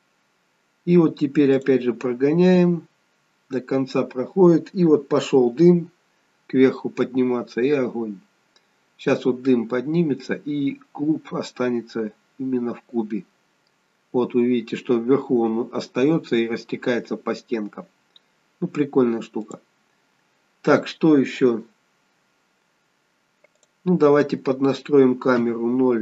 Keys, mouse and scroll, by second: 1.6 click, 5.6-6.2 scroll up 3, 6.7-8.9 scroll down 1, 11.1-14.1 scroll down 1, 19.5 click, 23.6 click, 25.4 KP_0.